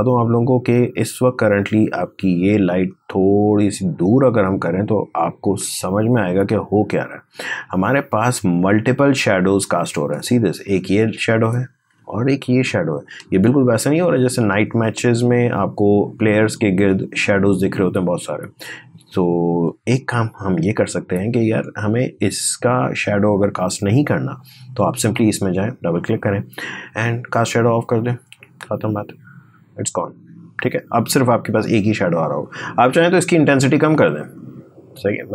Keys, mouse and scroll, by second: 2.7-7.3 drag, 7.3 space, 7.6 click, 7.8 space, 11.1 click, 11.3 space, 13.8-15.2 scroll down 1, 16.3-24.0 drag, 25.0 click, 32.8-35.3 drag.